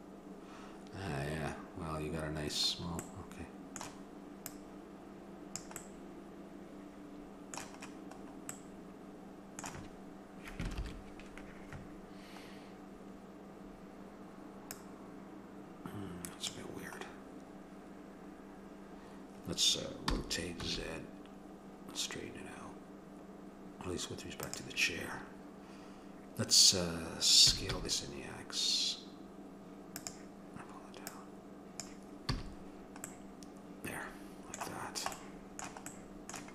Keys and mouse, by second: 3.1-5.6 middle drag, 4.4-6.4 drag, 5.8-8.2 middle drag, 8.6-10.8 middle drag, 13.3-14.8 middle drag, 14.8-16.6 drag, 17.2-18.9 middle drag, 20.1 r, 27.5 s, 31.1-33.1 drag, 32.3 a, 33.1 middle click.